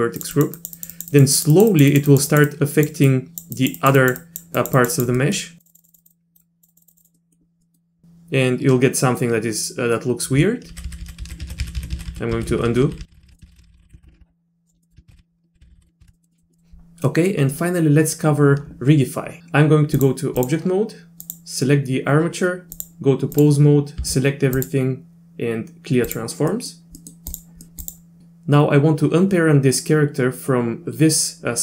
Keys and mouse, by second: 0.2 click, 0.3 click, 0.6 click, 0.8 click, 0.9 click, 1.1 click, 1.3 click, 1.5 click, 1.7 click, 1.9 click, 2.1 click, 2.3 click, 2.5 click, 3.1 click, 3.5 click, 3.8 click, 4.0 click, 4.2 click, 4.6 click, 4.8 click, 4.9 click, 5.2 click, 5.6 click, 5.7 click, 5.8 click, 5.9 click, 6.0 click, 6.1 click, 6.4 click, 6.7 click, 6.8 click, 6.9 click, 7.1 middle click, 7.6 click, 10.7 ctrl+z, 11.2 ctrl+z, 11.4 ctrl+z, 11.6-13.8 ctrl+z, 13.3 middle click, 14.0 ctrl+z, 14.7 ctrl+alt+z, 14.8 click, 15.2 ctrl+z, 15.3-15.8 ctrl+z, 16.0 ctrl+z, 16.1 middle click, 16.3 middle click, 16.5 middle click, 17.1 middle click, 20.0 click, 21.2 click, 22.8-23.4 drag, 24.0 a, 24.6-26.1 drag, 26.5 middle click, 27.0 middle click, 27.6 middle click, 27.7 Tab.